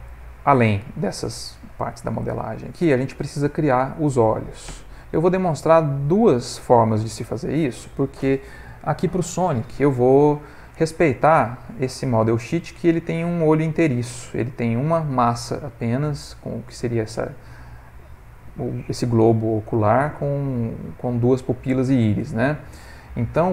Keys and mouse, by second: 0.4 middle click, 1.8 ctrl+middle click, 1.9 ctrl+middle click, 2.4 middle click, 3.6 shift+middle click, 4.0 ctrl+middle click, 4.2 shift+middle click, 5.9 click.